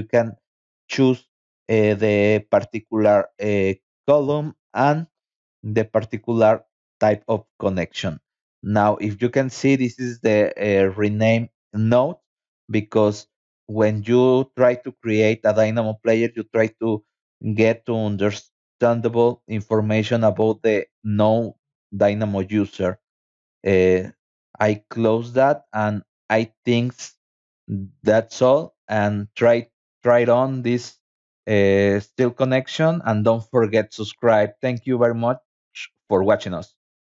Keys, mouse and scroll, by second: 0.2 scroll down 2, 0.8 middle click, 2.2 middle click, 4.3 middle click, 5.3 middle click, 9.2 scroll down 2, 9.9 scroll up 2, 10.5-11.1 scroll up 4, 15.6-16.2 scroll down 4, 17.1-17.4 scroll down 2, 17.8-18.4 scroll up 4, 19.0 scroll up 2, 21.8 scroll down 2, 22.2 middle click, 24.1 click, 25.3 click, 26.7 click, 28.2-29.0 scroll down 4, 34.4 click.